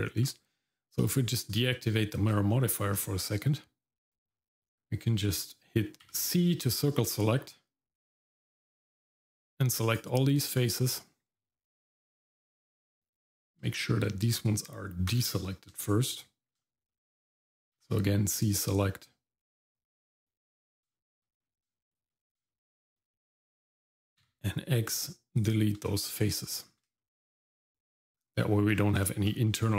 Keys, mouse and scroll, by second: 1.8 shift+middle click, 2.5 middle click, 2.9-4.3 scroll up 1, 4.3-4.8 scroll down 1, 6.0 c, 13.1 shift+middle click, 15.1 click, 15.8 shift+middle click, 16.6 shift+middle click, 16.9 middle click, 17.8 c, 20.6 scroll up 1, 20.9 shift+middle click, 21.4-21.9 scroll up 2, 21.9 shift+click, 22.5 shift+middle click, 23.1 middle click, 24.2 x, 25.9 shift+middle click, 26.6 scroll down 1, 27.0 shift+middle click, 28.4 middle click, 28.7 scroll down 1, 29.0 shift+middle click, 29.5 middle click.